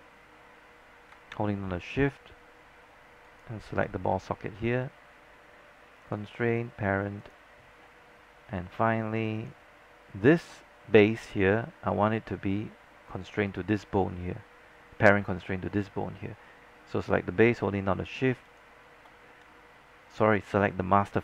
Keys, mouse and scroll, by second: 6.1 click, 18.6 shift+click, 20.4 click.